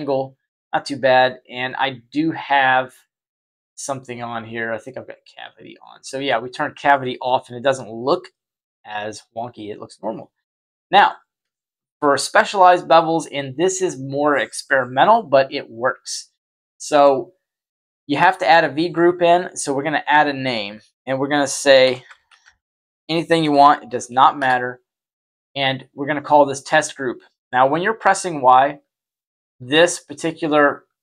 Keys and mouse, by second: 4.6 click, 5.1 click, 7.1-10.9 middle drag, 11.4-11.8 shift+middle drag, 12.1 middle click, 15.0-16.0 middle drag, 18.1-24.3 drag, 28.0-31.0 typing.